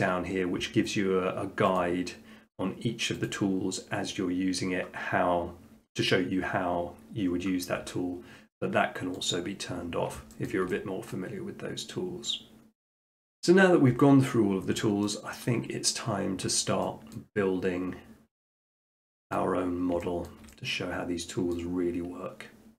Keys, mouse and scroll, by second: 1.8-2.9 drag, 3.3-4.4 drag, 9.3 click, 9.8 middle click, 10.5 shift+middle click, 11.1 middle click, 14.7 click, 15.5 shift+middle click, 16.0 middle click, 17.3 middle click, 17.5 middle click, 18.0 middle click, 18.6 shift+middle click, 19.3 middle click, 19.5 middle click, 20.3 shift+middle click, 21.6 middle click, 22.1 middle click.